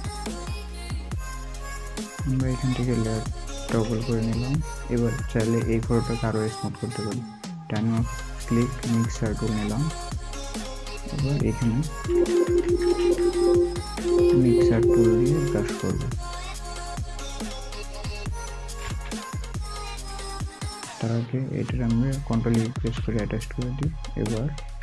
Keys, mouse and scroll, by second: 3.5 ctrl+j, 7.0 ctrl+j, 7.0 right click, 10.1 right click, 10.4 alt+scroll up 1, 12.1-14.4 typing, 16.7 scroll down 1, 17.8 typing, 20.8-21.5 typing, 22.6 typing, 22.7 ctrl+e.